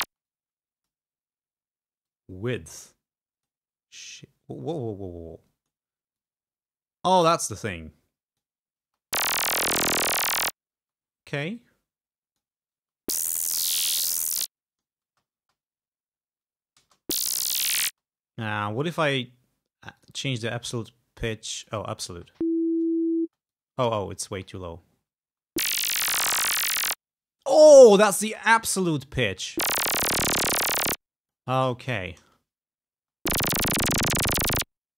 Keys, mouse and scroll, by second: 0.2 space, 0.4 click, 2.2-3.7 drag, 4.1-6.0 drag, 6.3-7.5 drag, 7.8 click, 8.9 space, 10.9 space, 11.7-12.7 drag, 12.9 space, 14.3 click, 15.2 space, 16.9 space, 17.9 space, 19.0 right click, 20.1 click, 20.7-22.3 drag, 22.3 space, 23.4 space, 23.6 click, 24.4 space, 25.4 space, 26.5-27.7 drag, 28.0 space, 29.4 space, 30.8-31.9 drag, 31.9 space, 33.1 space.